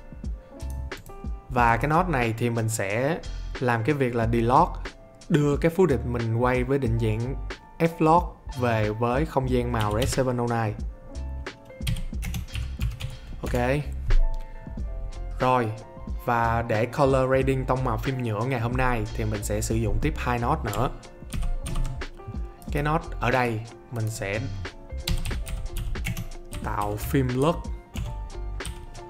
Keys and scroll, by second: 9.5-10.5 typing, 11.6-13.5 typing, 21.3 alt+s, 24.8-28.6 typing.